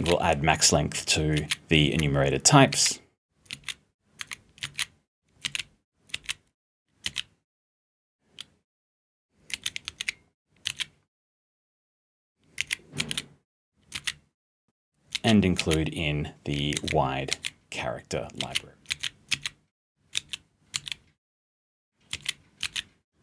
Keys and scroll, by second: 0.0-1.8 typing, 2.9 p, 3.5 g, 4.6-7.0 typing, 9.3-11.1 typing, 12.5 a, 15.1 u, 15.6 b, 16.7 #, 18.1-20.7 typing, 22.1 d, 22.6 r.